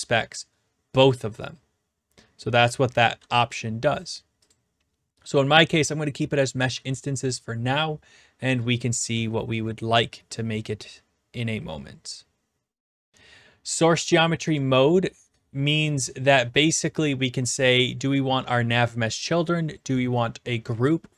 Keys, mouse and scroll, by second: 4.5 click, 14.6 click.